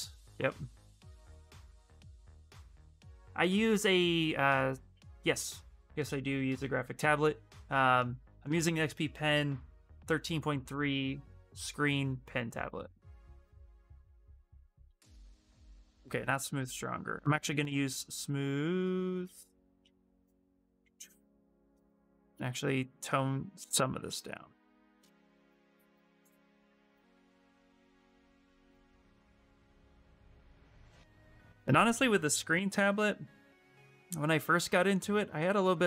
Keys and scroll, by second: 14.8 shift+space, 20.1 s.